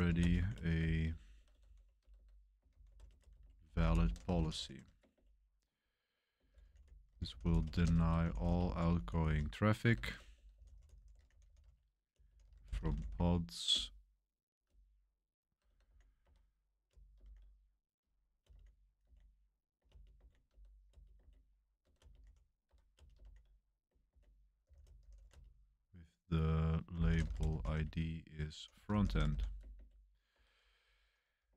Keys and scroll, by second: 0.0-5.1 typing, 6.2-13.5 typing, 13.7 Return, 14.6-17.2 typing, 18.4-29.7 typing, 30.3 Escape, 31.1-31.5 typing.